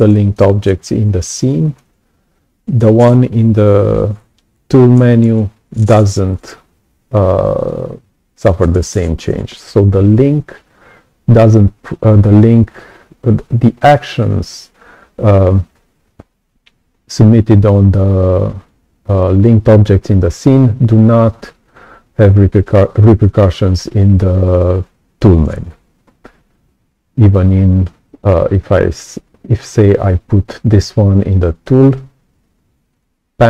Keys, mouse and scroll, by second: 0.6-1.7 alt+drag, 27.2 click, 29.5 right click, 31.7 click, 32.8 click.